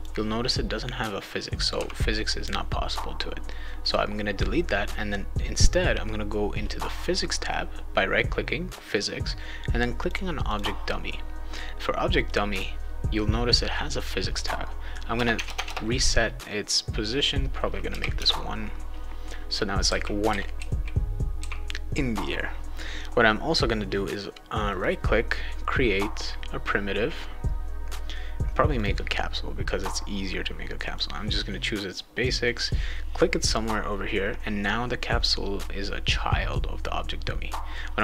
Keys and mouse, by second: 3.8 right click, 10.0 click, 10.5 click, 12.3 click, 15.3 Tab, 15.5 Tab, 19.6-21.7 right drag, 19.6-21.4 typing, 24.7 right click, 28.8 click, 30.8 click, 32.2 click, 37.7 click.